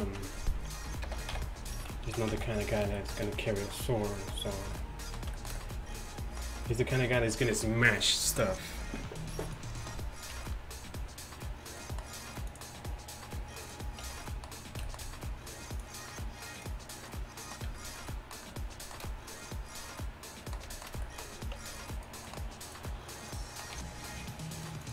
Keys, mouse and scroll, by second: 1.1 ctrl+l, 1.8 z, 2.1 z, 2.4 a, 8.9 middle click, 9.5 middle click, 9.7-12.5 right drag, 10.4 t, 12.5-13.7 drag, 14.1 t, 17.7 a, 21.6 Tab, 23.8 g.